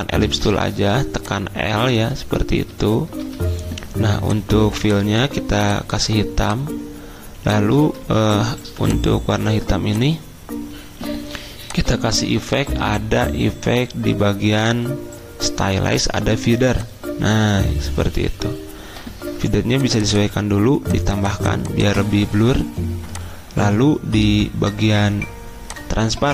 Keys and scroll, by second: 0.1-0.8 typing, 3.2 d, 6.2 d, 8.0 ctrl+z, 8.6 v, 14.3 v.